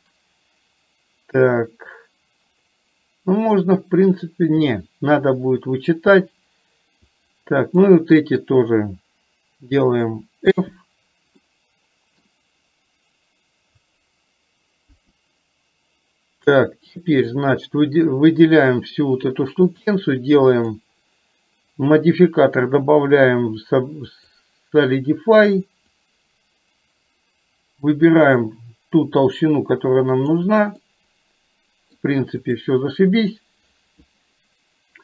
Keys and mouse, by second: 7.2 click, 11.5 middle click, 14.8 KP_1, 16.8 click, 19.8 click, 20.6-24.5 drag, 26.1-30.5 drag, 31.0-32.1 middle drag.